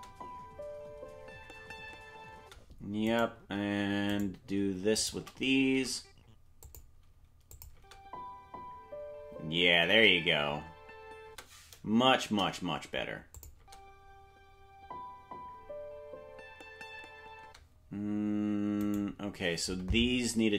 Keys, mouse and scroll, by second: 3.1 right click, 3.1 space, 5.0 shift+right click, 5.7 g, 7.5 click, 7.7 space, 12.2 space, 12.2 KP_0, 13.3 click, 13.5 space, 18.9 right click, 18.9 space.